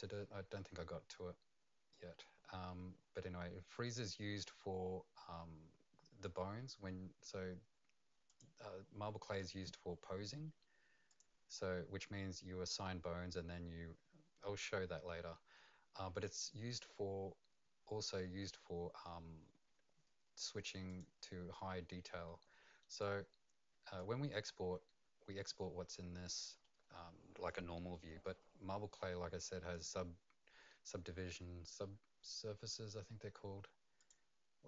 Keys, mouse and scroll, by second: 8.3 click, 11.1 click, 20.9 click, 22.2 middle click, 23.0 right click, 24.2-25.4 scroll up 2, 34.0 click.